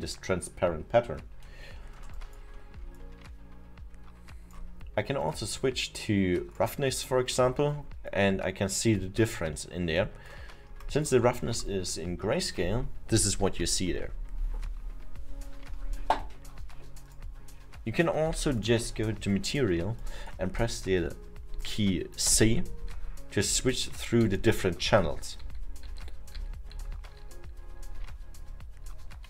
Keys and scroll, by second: 2.0 alt+7, 22.4 c, 23.6 c, 24.8-28.8 typing.